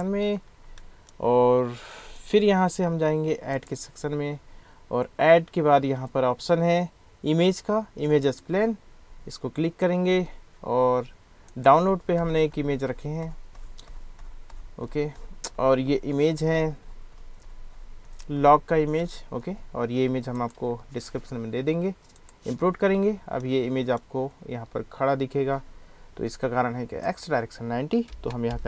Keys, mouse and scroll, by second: 0.1-0.6 middle drag, 0.8 middle click, 3.7-8.7 drag, 23.5 click, 23.6 middle click, 24.1-27.1 middle drag, 27.1-28.6 drag, 28.1 BackSpace, 28.5 0.